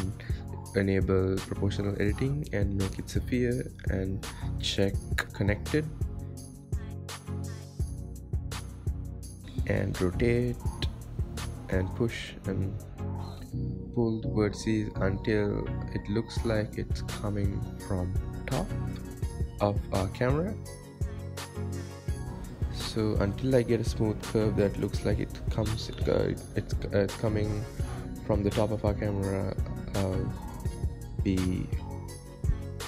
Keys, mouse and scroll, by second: 0.3 KP_1, 1.6 click, 2.0-5.1 drag, 6.3 g, 9.4 r, 11.0 g, 12.7 r, 15.8 g, 19.6 r, 20.7-22.4 drag, 23.0 click, 23.8 g, 25.1 click, 25.5 g, 26.4 click, 26.8 g, 27.6 click, 27.9 g, 29.4 click, 29.8 g, 31.5 click, 31.9 g.